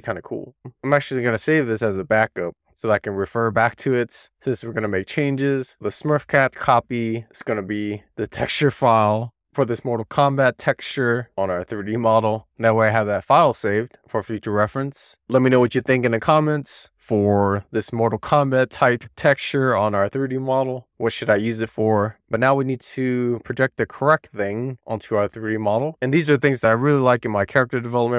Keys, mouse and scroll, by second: 0.3 scroll up 1, 0.6 middle click, 0.6 scroll down 1, 0.9-3.1 drag, 15.2 Tab, 15.5 a, 16.3-22.2 middle drag, 22.2 scroll up 3, 23.8 click, 24.1 Tab, 25.2 click, 25.7 Tab, 25.9-28.1 middle drag.